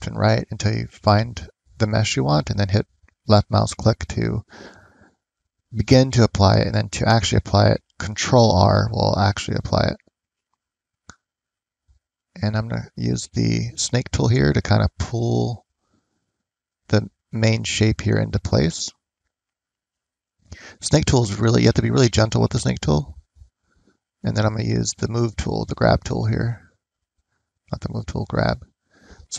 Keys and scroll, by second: 11.0 f, 11.7 ctrl+z.